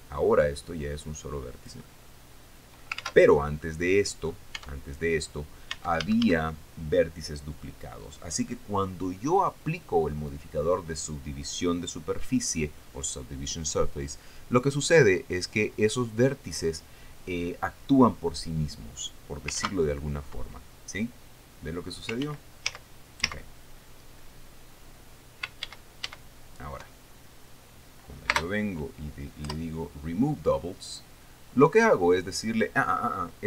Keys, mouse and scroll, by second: 1.3-3.5 drag, 2.4-3.5 middle drag, 3.5 ctrl+z, 4.2 middle click, 5.1 Tab, 5.8 scroll down 2, 6.3 Tab, 6.6 a, 20.1 ctrl+2, 22.8 ctrl+z, 26.2 ctrl+shift+z, 28.9 space, 30.0 Return.